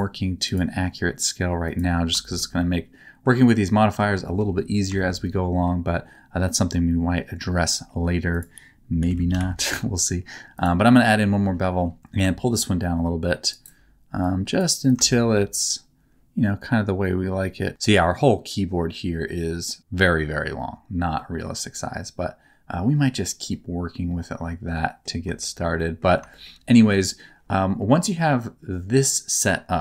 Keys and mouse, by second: 2.2 shift+middle click, 2.5 middle click, 3.5 middle click, 4.2 shift+middle click, 4.9 shift+middle click, 5.2 middle click, 8.4-10.6 drag, 12.2-13.5 shift+drag, 14.2 click, 14.9-17.7 shift+drag, 21.1 shift+middle click, 21.7-23.1 middle drag, 23.5-25.0 middle drag, 25.4 shift+middle click, 25.7 middle click, 26.3 shift+middle click, 26.9 middle click, 28.0 middle click.